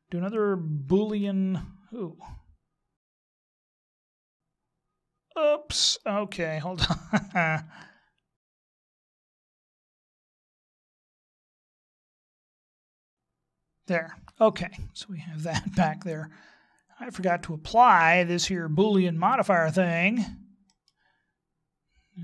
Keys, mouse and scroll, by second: 2.0 right click, 4.2 middle click, 8.4 ctrl+z, 9.1 ctrl+z, 9.2 ctrl+z, 9.4 ctrl+z, 9.6 ctrl+z, 9.7 ctrl+z, 9.8 ctrl+z, 10.0 ctrl+z, 10.1 ctrl+z, 10.2 ctrl+z, 10.5 ctrl+z, 10.5 ctrl+z, 10.6-11.0 ctrl+z, 11.3-11.7 scroll down 7, 12.0-12.5 ctrl+z.